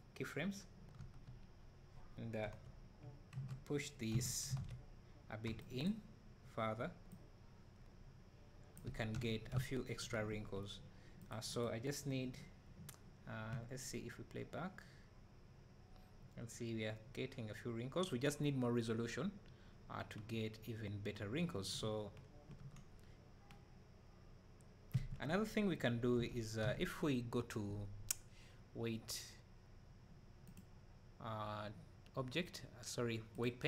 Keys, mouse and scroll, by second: 1.0 Tab, 2.5 KP_7, 4.6 alt+a, 4.7 middle click, 5.9 b, 7.2-13.5 drag, 8.9 Tab, 9.6 `, 13.5 space, 25.1 Escape, 26.2 Tab, 26.3 Tab, 26.7 Tab.